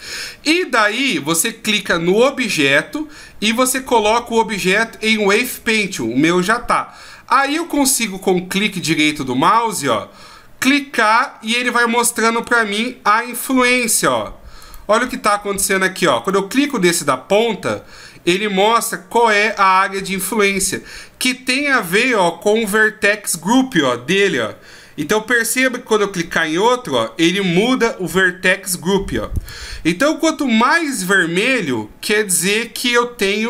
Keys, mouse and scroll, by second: 0.8 right click, 2.1 right click, 7.4 right click, 9.4 right click, 11.0 right click, 12.4 right click, 13.6 right click, 14.6 right click, 16.2 right click, 26.2 right click, 29.3 right click, 31.1 right click.